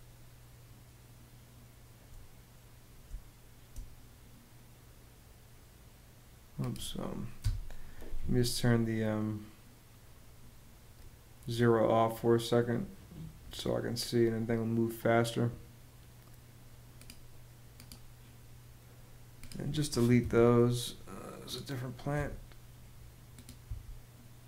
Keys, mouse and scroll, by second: 2.7 space, 7.0 BackSpace, 19.8 BackSpace, 21.8 BackSpace, 23.3 BackSpace.